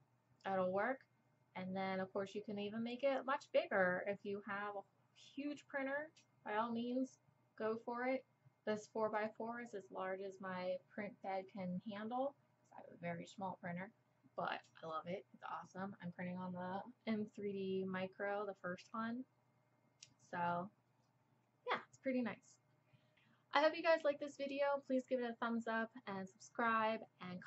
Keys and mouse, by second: 9.2-27.4 drag.